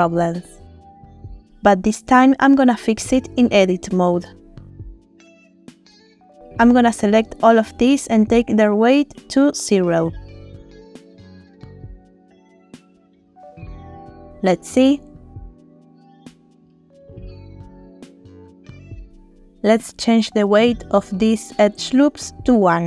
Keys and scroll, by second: 14.0 Tab, 14.6 space, 18.4 space, 18.6 Tab, 21.3 1, 21.4 Return, 22.5 space.